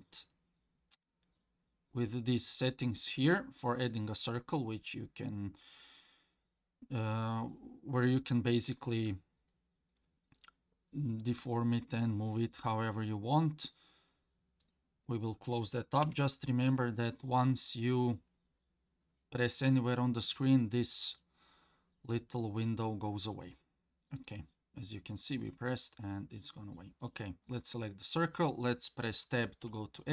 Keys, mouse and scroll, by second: 0.2 click, 11.2-14.7 drag, 15.1-17.8 drag, 24.2 click, 25.1 click, 27.0 click, 29.7 Tab.